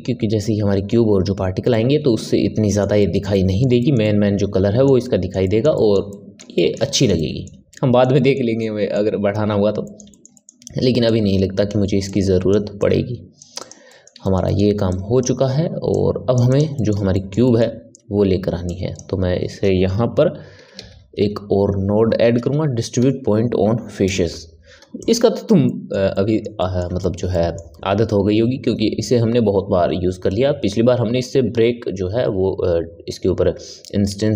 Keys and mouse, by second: 11.0 click, 12.0 click, 13.5 click, 13.8-14.8 middle drag, 14.8 click, 15.9 click, 16.4 click, 16.7-18.6 middle drag, 18.6 click, 25.6-34.3 middle drag.